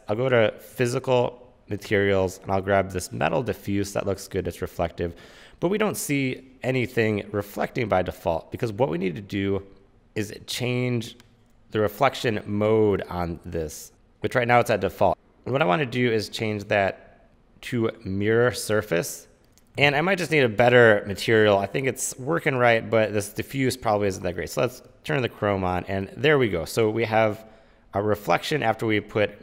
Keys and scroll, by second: 15.1 super+z, 19.4 super+z.